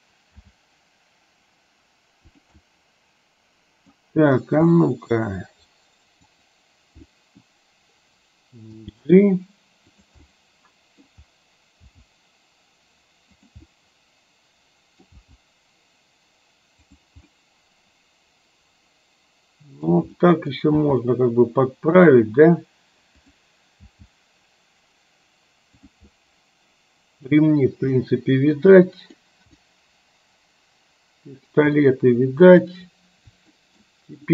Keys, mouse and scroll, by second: 0.5 g, 2.6-4.0 middle drag, 4.8 middle click, 6.3 click, 7.1 middle click, 8.8 g, 10.3 middle click, 13.7-15.2 middle drag, 15.2 g, 17.5-20.1 middle drag, 20.2 middle click, 20.8 g, 24.0 g, 26.2-27.3 middle drag, 28.1 scroll up 1, 28.2-28.7 middle drag, 28.8-29.3 middle drag, 29.7-31.6 middle drag, 31.8 scroll up 1, 32.0-32.7 middle drag, 33.7 shift+middle click.